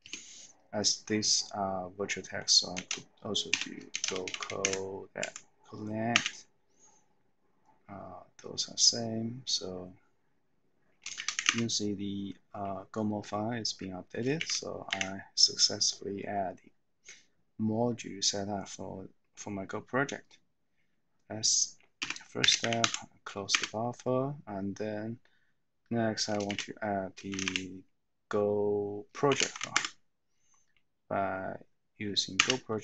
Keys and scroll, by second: 2.9 typing, 4.1-4.8 typing, 5.2 Tab, 6.1 Return, 11.0-11.8 typing, 14.6-15.3 typing, 22.1-23.0 typing, 23.5 Return, 26.6-27.9 typing, 29.2-30.2 typing, 32.5 Return.